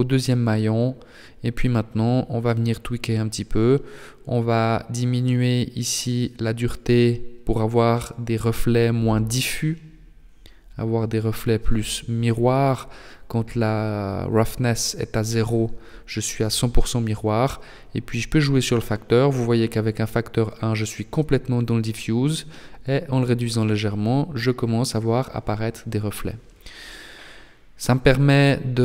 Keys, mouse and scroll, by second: 4.2 click, 4.8 right click, 6.2 right click, 6.5 right click, 14.6 click, 23.8 click.